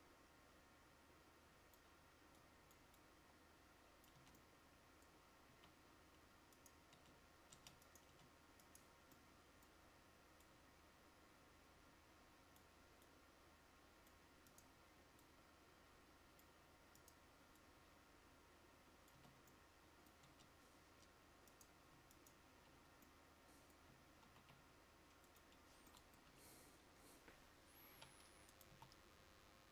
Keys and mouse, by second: 4.3 Tab, 5.6 a, 7.0 Tab, 7.7 Tab, 11.7-20.3 drag, 19.3 Tab, 20.3 Tab, 24.3 shift+d, 26.4 KP_1, 28.1 r, 28.8 s.